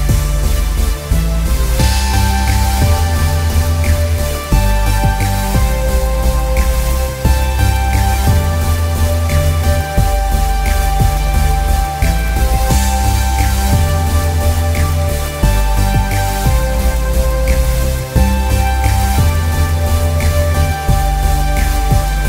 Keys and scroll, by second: 7.7 alt+l, 7.9 alt+y, 8.0 n.